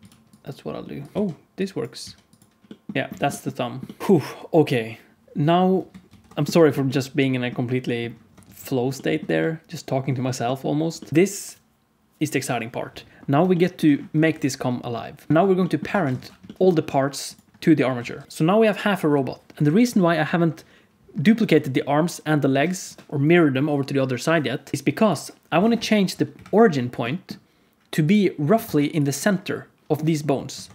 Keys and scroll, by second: 1.9 x, 2.9 alt+a, 2.9 ctrl+s, 2.9 alt+z, 3.1 ctrl+s, 6.1 ctrl+s, 8.4 ctrl+s, 14.2 ctrl+s, 15.8 alt+a, 16.1 ctrl+s, 18.0 alt+a, 18.2 alt+shift+z, 26.2 KP_Decimal, 28.6 ctrl+Tab, 30.6 ctrl+Tab.